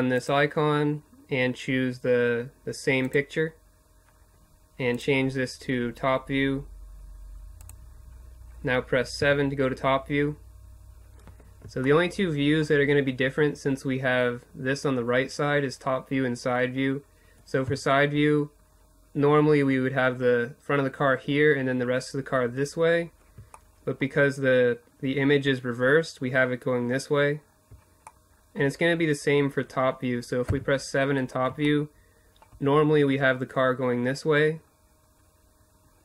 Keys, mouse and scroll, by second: 4.7-6.1 drag, 7.6 KP_7, 10.2 click, 11.2-16.1 middle drag, 16.1 KP_3, 19.5-29.1 middle drag, 28.9 KP_7, 30.1 middle click, 34.7-36.0 middle drag.